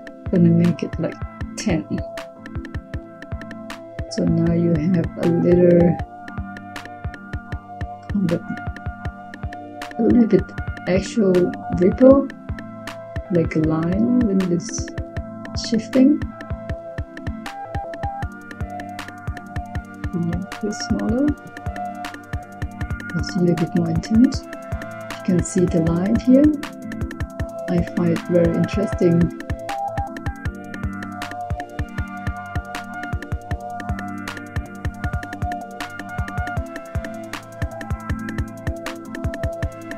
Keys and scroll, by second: 0.5-1.7 typing.